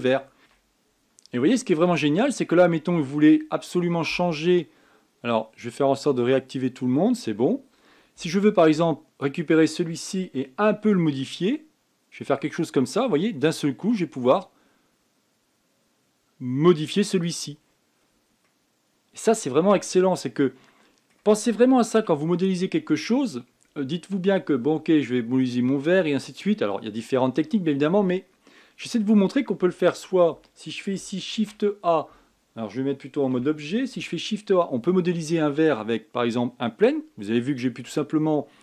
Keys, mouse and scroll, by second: 0.4 KP_1, 0.8 shift+middle click, 1.3 scroll up 1, 1.5-2.3 scroll down 4, 2.3 shift+middle click, 2.6-6.3 scroll up 4, 6.3 scroll down 6, 6.9 scroll up 2, 7.7 scroll up 9, 9.4 click, 11.6 g, 18.4 scroll down 5, 19.2-22.2 middle drag, 22.8 KP_1, 23.1 scroll up 3, 23.9 scroll up 4, 24.4-24.9 scroll down 2, 32.1 shift+a, 34.1 Tab, 34.7 shift+a.